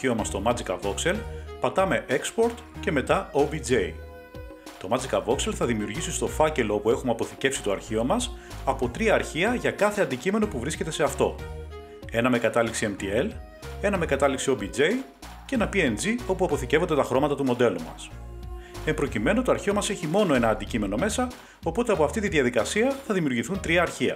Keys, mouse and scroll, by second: 2.1-3.8 drag, 5.8-6.3 scroll down 2, 6.9 click, 6.9 scroll down 2, 8.8 scroll up 4, 9.8 click, 9.8 scroll.